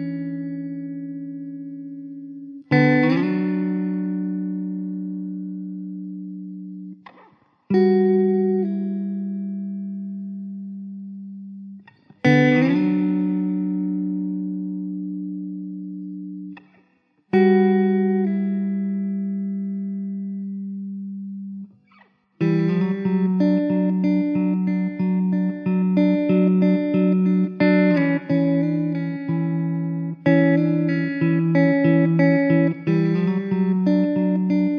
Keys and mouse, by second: 0.1 alt+w, 8.1 alt+w, 9.2 middle click, 11.5 middle click, 18.0-19.0 typing, 20.8 1.